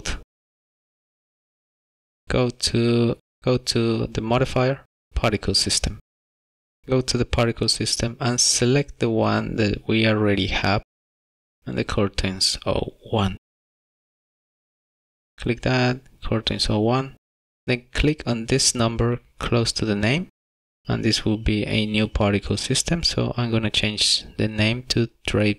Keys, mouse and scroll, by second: 0.4 shift+middle click, 3.4 click, 3.8 click, 5.2 click, 7.8 click, 15.5 click, 21.5 click, 23.3 click.